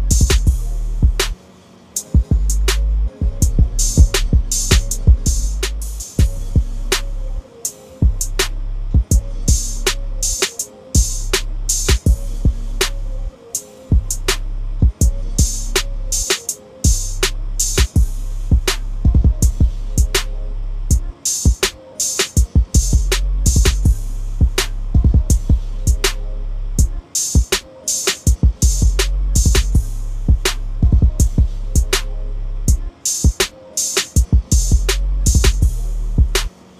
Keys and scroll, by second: 6.5 ctrl+a, 6.9 ctrl+c, 7.7 ctrl+n, 9.7 Return, 9.9 ctrl+v, 19.8 typing, 23.8 ctrl+a, 24.7 ctrl+c, 26.2 ctrl+v, 31.0 ctrl+a, 31.5 ctrl+c, 32.9 ctrl+n, 35.1 ctrl+v.